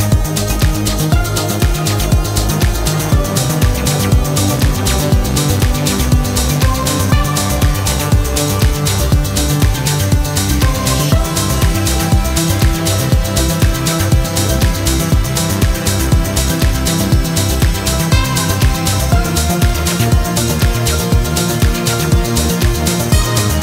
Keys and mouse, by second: 1.4 click, 2.3-6.9 drag, 7.5 click, 9.2 click, 10.2 click, 10.6-11.3 middle drag, 12.6-13.0 middle drag, 14.6-17.7 drag, 18.6-18.9 middle drag, 20.2 click, 21.1-23.6 drag.